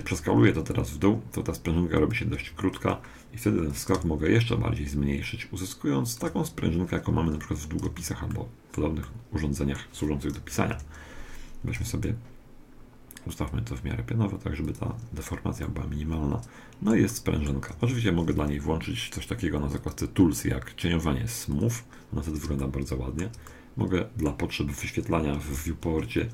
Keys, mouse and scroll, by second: 0.0 s, 2.4 Tab, 3.8-5.4 drag, 6.9-11.0 middle drag, 7.8 Tab, 10.4 KP_1, 10.7 KP_3, 11.8 r, 15.6-19.1 middle drag, 17.7 Tab, 18.2 t, 19.8-23.2 drag, 22.6-25.4 middle drag, 25.5 n.